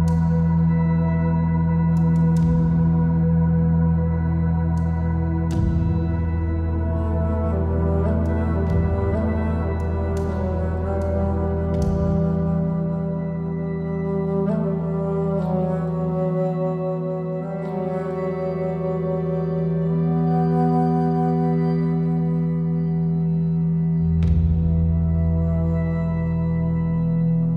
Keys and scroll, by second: 20.4 super+s.